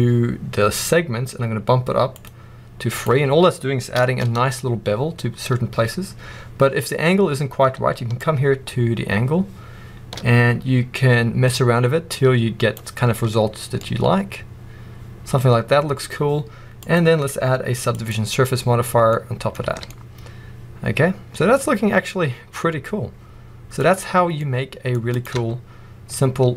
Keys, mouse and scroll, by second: 2.0-3.9 drag, 3.9 shift+middle drag, 4.1 scroll up 1, 8.0-13.7 shift+drag, 12.9 scroll down 1, 13.7-16.7 middle drag, 16.7-19.0 drag, 18.6-19.0 scroll down 2, 19.0-25.0 middle drag, 19.6 alt+a, 23.6-24.3 scroll up 2, 25.0 click, 25.3 Tab, 26.1 middle click.